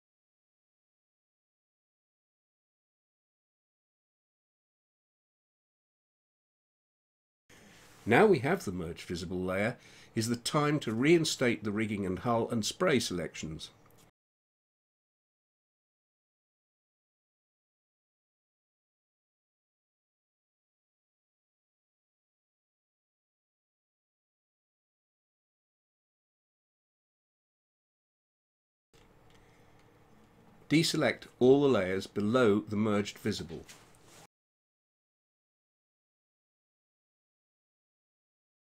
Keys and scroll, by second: 36.1-37.8 typing.